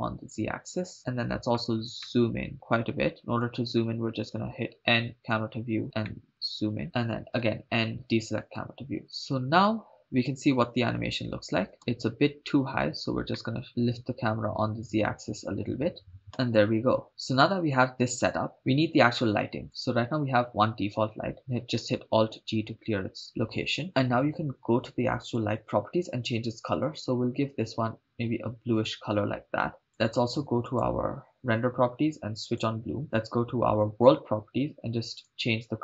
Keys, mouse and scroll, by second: 2.1-4.5 ctrl+middle drag, 4.5 n, 5.2 click, 5.7 n, 6.3 ctrl+middle click, 7.9 n, 8.0 click, 8.5 n, 9.0-10.0 drag, 11.8-12.3 drag, 13.7-16.2 drag, 17.1 shift+space, 20.0 click, 22.5 alt+g, 25.2 click, 26.7-28.1 drag, 31.3 click, 32.8 click, 34.2 drag, 35.1 click.